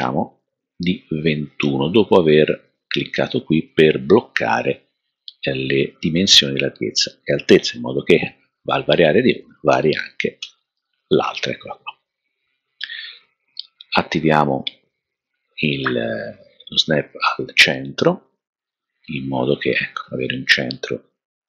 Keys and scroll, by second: 8.8-10.4 typing.